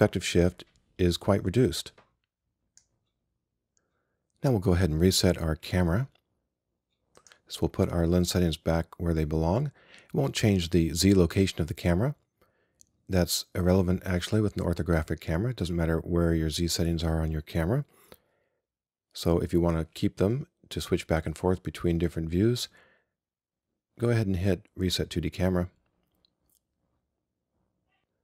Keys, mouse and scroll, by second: 7.3-12.5 drag.